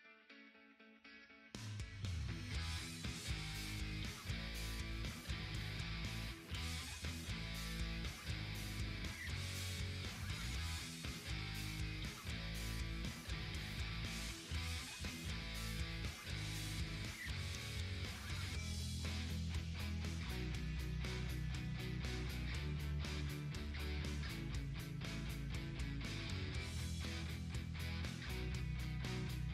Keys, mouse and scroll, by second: 1.1 ctrl+Num_Lock, 2.0 ctrl+j, 2.5-7.5 drag, 7.5 click, 8.5 ctrl+t, 9.1-16.0 drag, 18.7-23.5 drag, 23.5 ctrl+z, 25.2-29.5 drag.